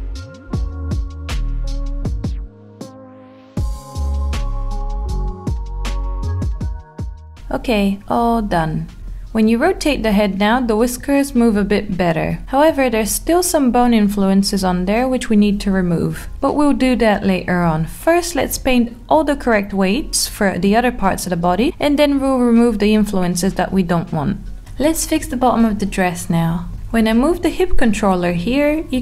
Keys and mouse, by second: 0.2 alt+middle click, 0.8 click, 1.1 alt+middle click, 2.8 alt+middle click, 7.4 Tab, 10.1 Tab, 12.1 click, 17.6 click, 19.0 r, 20.4 z, 24.0 click, 25.7 middle click, 26.8 g.